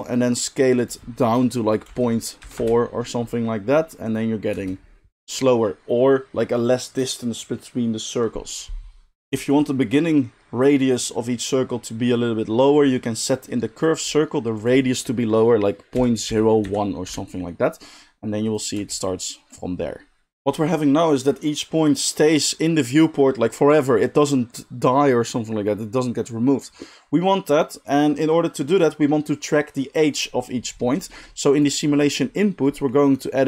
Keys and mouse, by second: 0.0-31.6 drag, 4.5 space, 18.7 space, 31.6-33.4 middle drag.